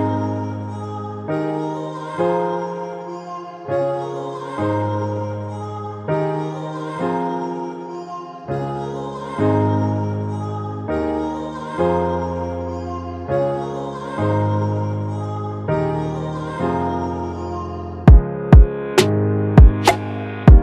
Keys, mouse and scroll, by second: 4.1 Right, 5.1 Right, 5.2 Left, 6.3 Return.